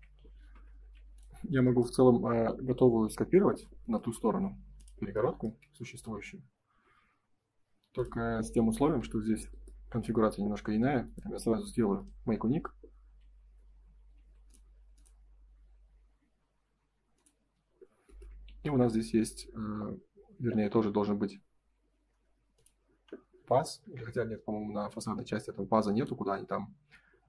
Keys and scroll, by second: 0.3 ctrl+s, 4.0 m, 8.1 space, 8.8 ctrl+s, 13.0 q, 13.6 space, 14.1 q, 17.3 space, 18.4 ctrl+s.